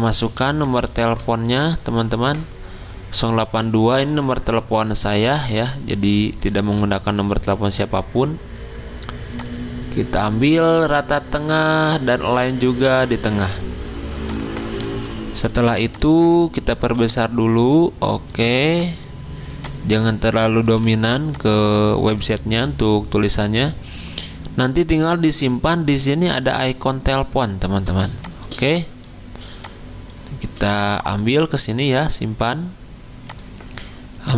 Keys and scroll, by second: 0.2 t, 0.8 ctrl+a, 1.4 ctrl+v.